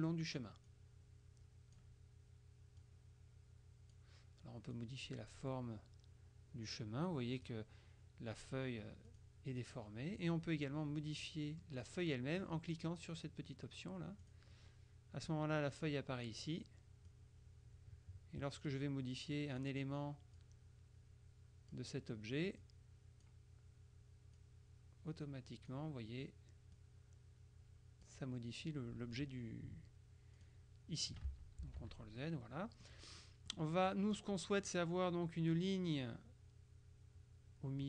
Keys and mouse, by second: 0.8 click, 2.9-4.6 drag, 4.8-8.1 drag, 9.2 click, 11.4 click, 12.4 click, 14.3 click, 15.8 click, 17.2-19.3 drag, 19.4 click, 20.4-22.3 drag, 22.7 click, 24.4-26.3 drag, 26.8-28.6 drag, 30.4 click, 31.4 ctrl+z, 32.3-33.4 ctrl+drag, 34.0 click, 34.5 click.